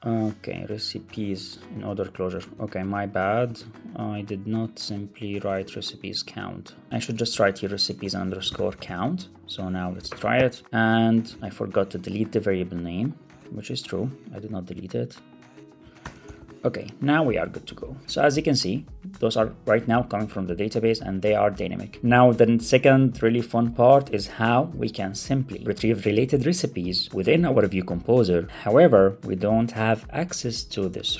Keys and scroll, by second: 2.3 super+c, 4.4 ctrl+Tab, 5.4 ctrl+Tab, 7.1 alt+shift+Left, 7.5 Right, 8.8 super+s, 9.9 super+r, 11.3 super+c, 13.3 ctrl+Tab, 15.9 super+BackSpace, 16.2 alt+super+l, 16.3 super+s, 18.0 super+r.